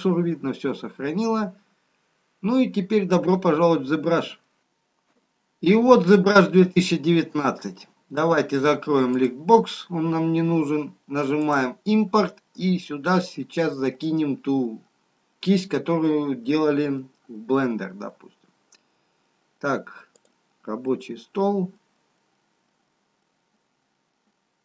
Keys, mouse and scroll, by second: 1.0-1.6 scroll up 1, 2.3 scroll down 2.